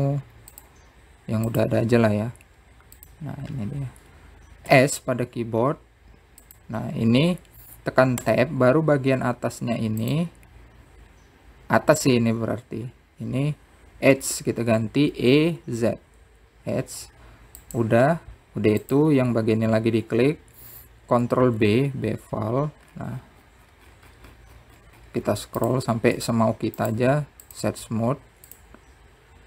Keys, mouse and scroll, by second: 3.9 s, 7.5 Tab, 9.3 click, 14.4 e, 18.0 click, 20.9 ctrl+b, 25.4 Tab, 26.1-27.4 right drag, 27.8 click, 28.8 click, 29.4 click.